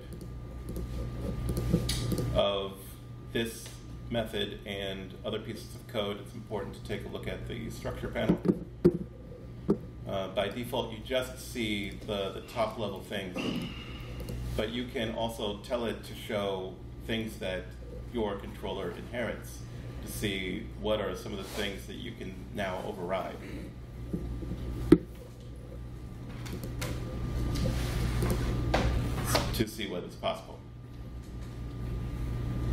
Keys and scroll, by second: 7.0 super+7.